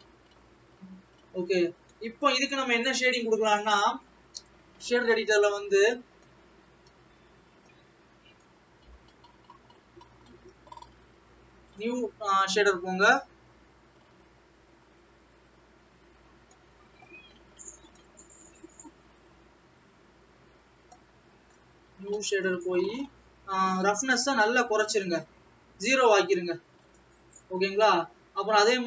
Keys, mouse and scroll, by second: 26.1 click.